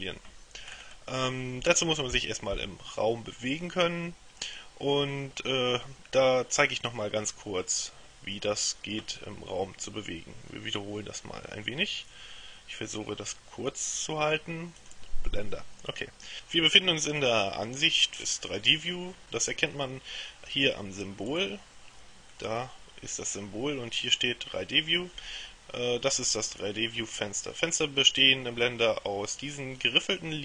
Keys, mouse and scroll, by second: 0.7-1.4 scroll up 2, 14.8 click, 21.4 click.